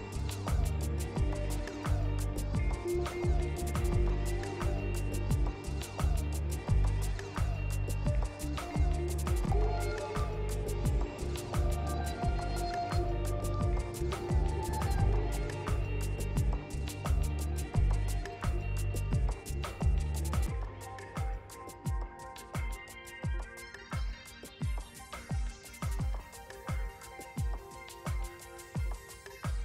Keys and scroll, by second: 3.1 q.